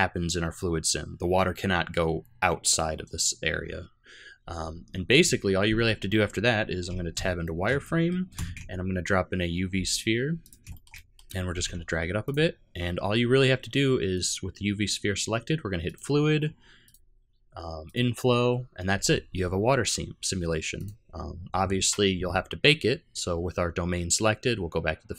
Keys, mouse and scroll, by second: 5.6 z, 7.4 shift+middle click, 7.8 middle click, 8.4 shift+a, 10.7 shift+middle click, 10.9 middle click, 11.5 g, 15.8 click, 16.8 click, 20.7 click.